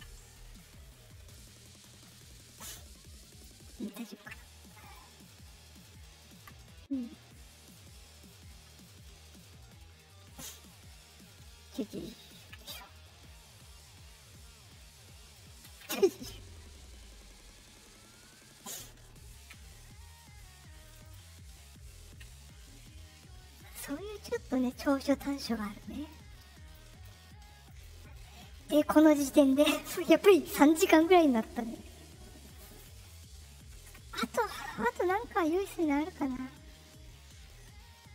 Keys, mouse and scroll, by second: 1.2 right click, 2.0 right click, 2.4 right click, 3.2 click, 4.8 click, 7.1 right click, 7.9-9.2 ctrl+middle drag, 9.4 middle click, 10.7-11.7 ctrl+middle drag, 14.7 right click, 15.7 ctrl+z, 16.0-18.6 right drag, 19.6 right click, 20.8 click, 21.0 click, 21.4 middle click, 21.4-21.8 scroll down 2, 24.6 middle click, 24.6 scroll down 2, 26.0 click, 27.6 click.